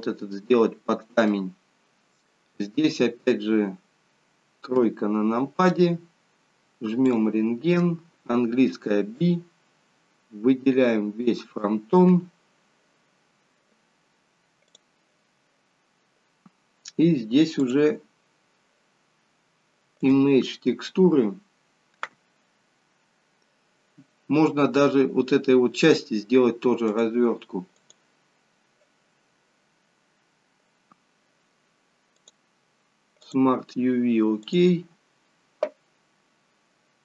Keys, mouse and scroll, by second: 0.3 middle click, 0.3-0.9 scroll up 1, 4.8 KP_3, 7.1 click, 8.6 b, 14.8 click, 17.6 click.